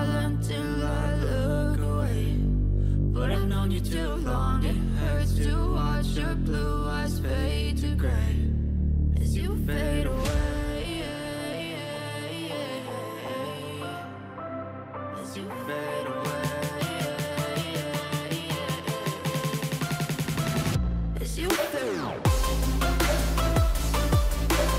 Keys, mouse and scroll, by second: 0.1-3.3 typing, 4.6 ctrl+a, 11.9 double click, 12.1 double click.